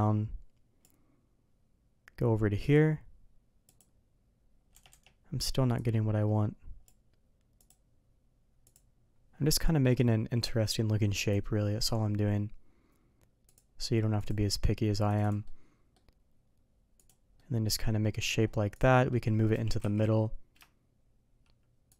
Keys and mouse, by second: 5.7-6.8 drag, 15.4-17.0 middle drag, 17.3-17.7 middle drag, 18.1 middle drag, 18.7 click, 18.9 middle drag, 19.5 g.